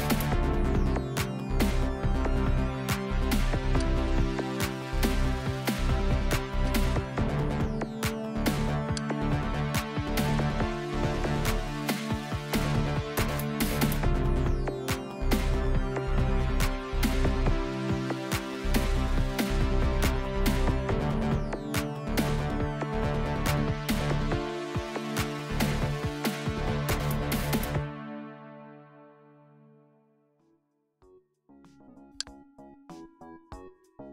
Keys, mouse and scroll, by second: 3.8 click, 6.7 click, 9.0 click, 10.9-14.1 typing, 14.6 Return, 15.3-19.1 typing, 23.6 Return, 24.8 shift+8, 26.0-29.9 typing, 32.2 click.